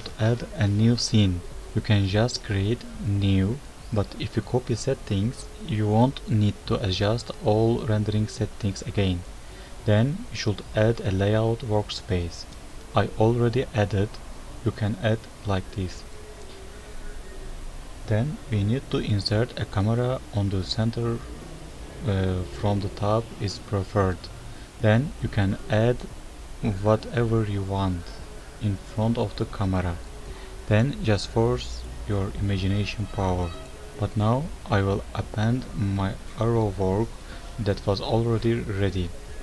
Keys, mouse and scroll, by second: 17.7 click, 24.0 shift+a, 30.3 KP_7, 30.4 ctrl+alt+KP_0, 31.5 shift+a, 32.7 Tab, 32.9 click, 33.1 shift+click, 33.2 e, 34.0 s, 34.7-35.1 ctrl+z, 35.6 click, 35.8 click, 36.1 click, 36.2 click.